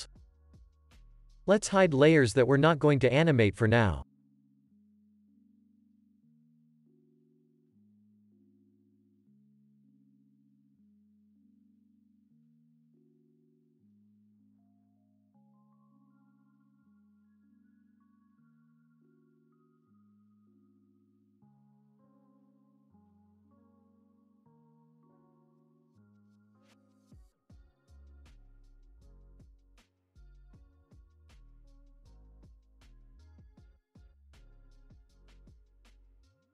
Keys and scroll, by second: 1.4 space, 20.8 ctrl+s, 28.3 ctrl+s, 32.9 ctrl+s, 35.3 ctrl+s.